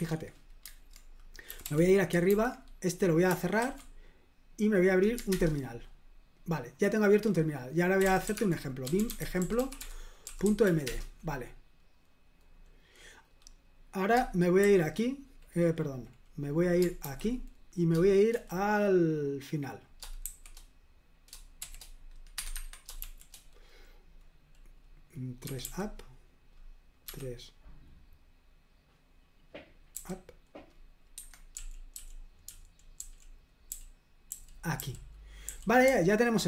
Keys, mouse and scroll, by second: 1.5 typing, 2.3 super+h, 3.6 ctrl+w, 5.3 super+Return, 7.7-11.1 typing, 17.0 super+h, 21.6 g, 22.5 Escape, 22.5 Tab, 23.0 shift+g, 25.4 3, 27.0 3, 29.9 u, 31.1 Escape, 31.5-35.8 typing.